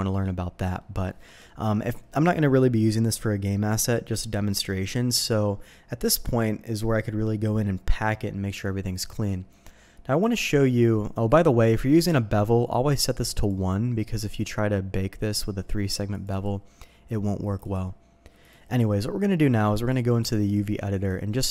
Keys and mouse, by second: 0.7 middle click, 1.4 middle click, 10.2 click, 13.1 click, 13.3 click, 16.1 click, 17.4 click, 17.6 click, 18.4 click, 20.0-21.5 drag.